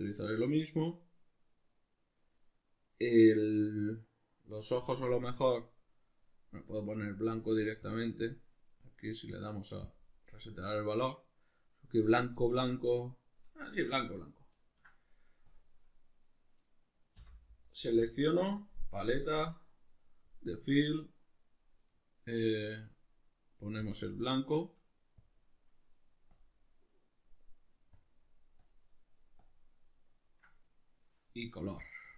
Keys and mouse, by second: 8.5-13.8 right drag, 13.8-15.5 shift+middle drag, 15.5 drag, 16.2 right click, 17.2 l, 19.1-23.9 drag, 25.2 click, 26.4-28.8 drag, 29.4 click, 29.9-32.1 middle drag.